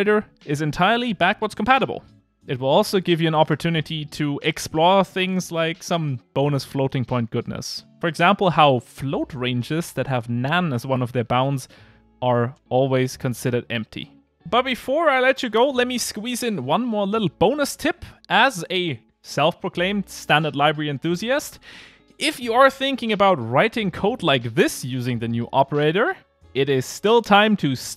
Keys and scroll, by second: 5.7 Return, 6.7 Return, 7.2 Return, 8.3 ctrl+r, 25.5 Return.